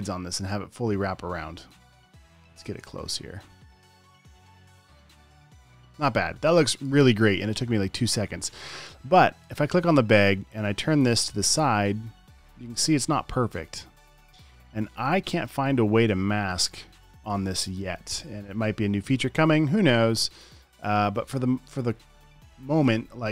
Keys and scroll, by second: 3.2 super+z, 18.3 super+z.